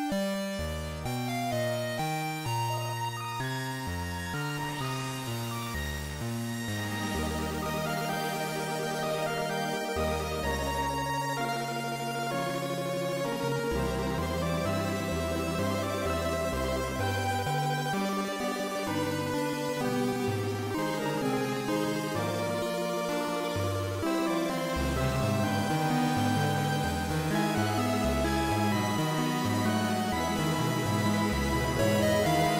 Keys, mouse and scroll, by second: 4.9 ctrl+Up, 9.0 middle click, 14.5-15.0 scroll up 1, 15.7 shift+a, 29.9 KP_7.